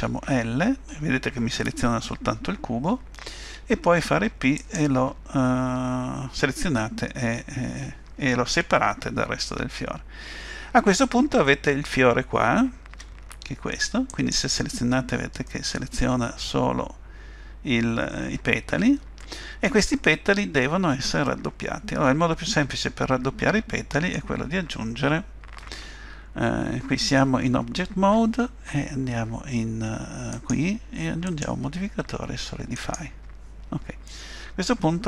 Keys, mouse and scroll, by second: 0.3 l, 12.9 Tab, 14.1 click, 15.5 middle click, 21.3 middle click, 30.3 click, 31.3 click, 34.1 middle click.